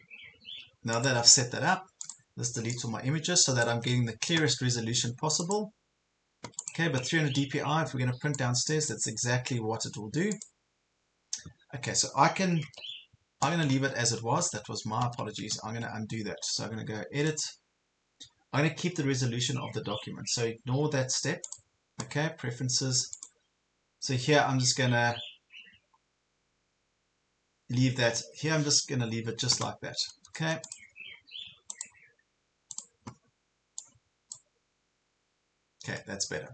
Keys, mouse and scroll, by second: 3.8 Delete, 5.4 click, 6.8 click, 12.8 ctrl+z, 13.8 ctrl+z, 14.0 ctrl+z, 14.4 ctrl+z, 14.7 ctrl+z, 15.0 ctrl+z, 15.6 ctrl+z, 17.3-36.5 drag.